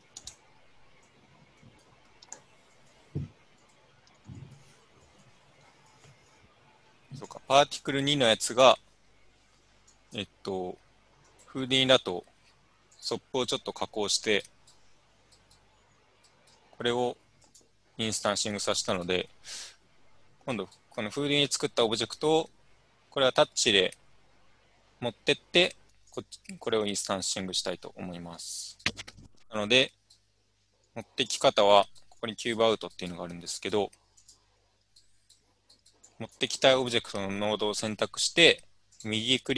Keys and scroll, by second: 0.0-0.6 typing.